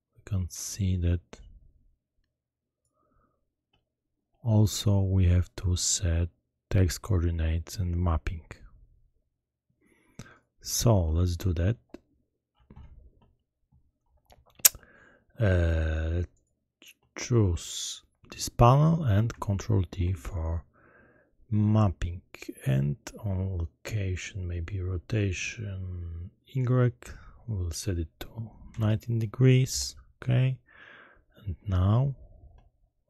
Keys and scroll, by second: 19.8 ctrl+t, 28.7 0, 29.7 Return.